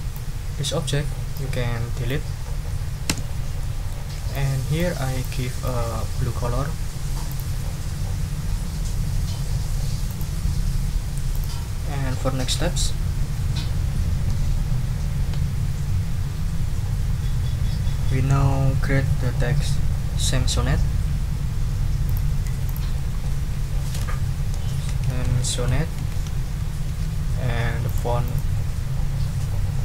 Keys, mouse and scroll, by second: 1.3 click, 3.1 Delete, 3.6 click, 4.3 click, 5.2-6.4 drag, 7.3 click, 10.1 click, 11.3 click, 22.0 click, 22.6 click, 23.6-26.6 typing, 26.9 ctrl+a, 27.8 click, 28.2 click.